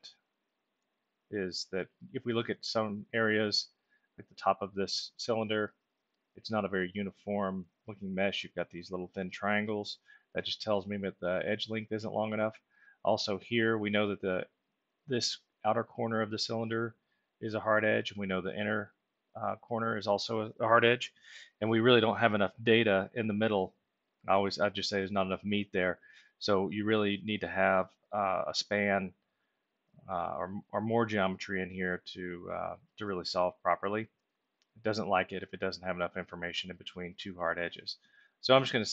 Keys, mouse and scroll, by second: 0.2-1.4 alt+middle drag, 8.0 ctrl+alt+middle click, 33.4 ctrl+alt+middle click, 38.2 click.